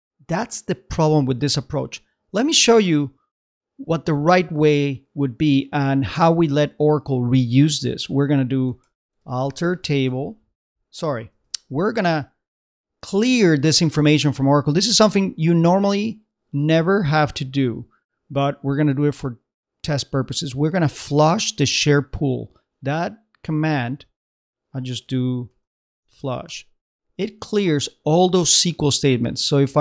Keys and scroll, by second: 14.2 super+Tab, 23.9 super+Tab, 24.7 shift+super+Tab, 25.5 shift+f.